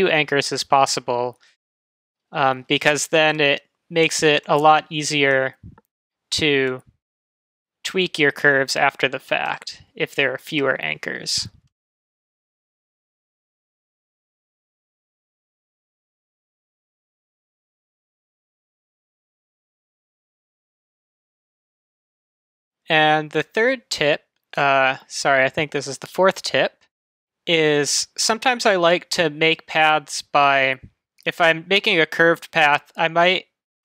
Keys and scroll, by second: 21.8 BackSpace.